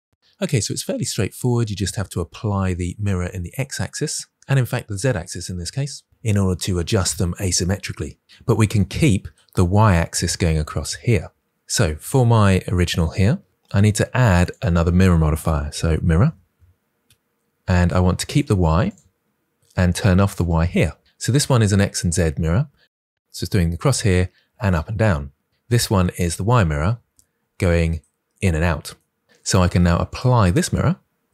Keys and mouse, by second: 1.0 click, 14.3-16.9 drag, 16.9 r, 18.1 click, 18.7 click, 20.2 click, 30.0-31.3 drag.